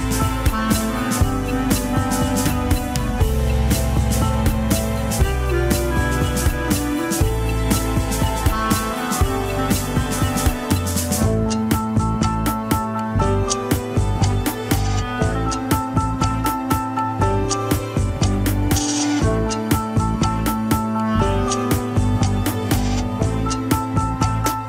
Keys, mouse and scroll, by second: 0.3 KP_3, 1.2 Tab, 1.4 scroll down 3, 1.5 click, 1.9 middle click, 2.3-2.7 scroll up 2, 2.5 shift+middle click, 2.9-4.0 middle drag, 4.0 click, 4.4 KP_1, 4.5-4.8 scroll up 4, 5.0 Tab, 5.1 s, 5.7 KP_3, 6.0 g, 7.5 scroll down 3, 7.7 shift+middle click, 8.2-10.7 typing, 8.5 Tab, 8.7 click, 9.0 Tab, 11.0 Tab, 11.1 scroll down 1, 11.3-12.5 shift+middle drag, 12.5 drag, 12.8-13.1 middle drag, 13.1 Tab, 13.4 alt+z, 13.7 click, 14.1 l, 14.3 scroll up 3, 14.5 alt+z, 14.6 s, 15.6 KP_7, 15.8-16.2 scroll up 3, 16.0 shift+middle click, 16.9-17.4 scroll down 1, 17.4 g, 18.5 Tab, 18.8 click, 19.1 Tab, 19.4 alt+z, 19.8 click, 20.1 alt+z, 20.4 r, 21.4 click, 21.8 alt+z, 22.1 click, 22.4 alt+z, 22.6 r, 23.2 Tab, 23.5 click.